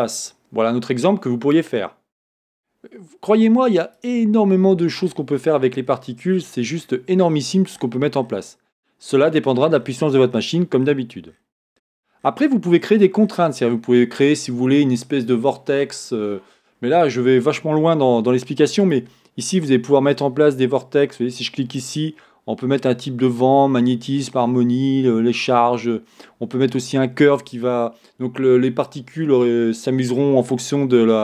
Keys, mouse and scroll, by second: 4.2 click, 5.2-7.5 scroll down 1, 19.1-31.2 drag, 19.7-21.1 scroll down 1.